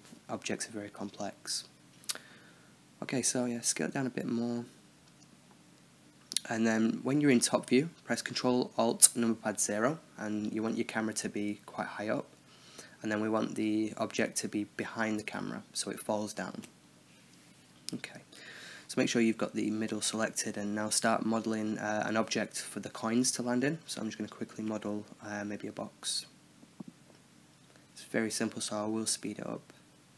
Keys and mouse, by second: 0.3 middle drag, 2.5 KP_7, 3.4 s, 6.1 ctrl+alt+KP_0, 7.2 s, 8.7-9.7 middle drag, 9.3 ctrl+a, 10.2 middle drag, 11.5-12.6 drag, 14.4 KP_0, 15.9 space, 18.9-22.7 middle drag, 22.1 shift+a, 23.2 Tab, 23.2 middle drag, 23.6 Tab, 23.8-26.2 typing, 24.7 Tab, 24.7 middle drag, 25.0 middle click, 25.1 Tab, 25.9 click, 26.1 right click, 27.2 shift+d, 27.4 r, 27.8 click, 28.0 click, 28.3 middle click, 28.6 click, 28.9 middle click, 29.3 Tab, 29.5 click, 29.8 click.